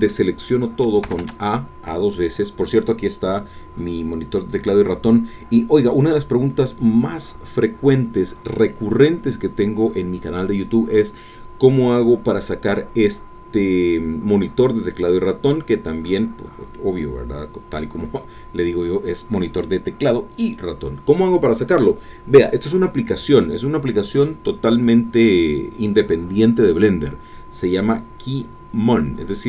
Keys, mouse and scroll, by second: 1.0 a, 3.8 click, 4.1-7.7 drag, 17.1 scroll down 2, 17.2 scroll up 1, 17.4-18.3 scroll down 2, 18.3 scroll up 1, 18.6-20.8 scroll down 2, 20.8 scroll down 1.